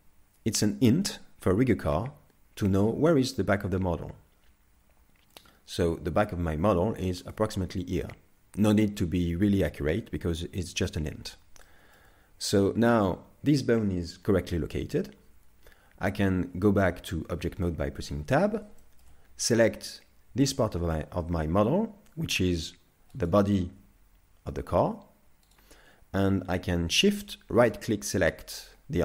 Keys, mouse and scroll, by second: 5.4 click, 11.6 shift+middle click, 16.5 Tab, 17.6 shift+middle click, 18.8 shift+middle click, 19.6 right click, 20.6 shift+middle click, 22.3 r, 23.8 g, 27.6 shift+right click.